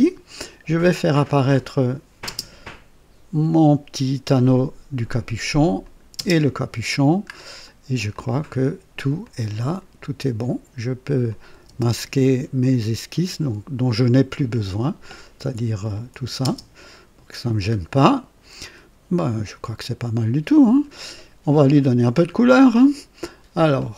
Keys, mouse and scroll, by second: 1.3 click, 2.2 space, 4.2-5.2 drag, 5.8 click, 6.1 typing, 7.3-7.7 scroll down 2, 8.1 click, 9.2 click, 11.2 click, 11.6 space, 14.3 click, 15.0 click, 15.9 shift+click, 16.4 shift+space, 17.4-17.7 shift+scroll down 1, 18.0-21.0 drag, 21.8-22.2 scroll down 2, 22.0 typing.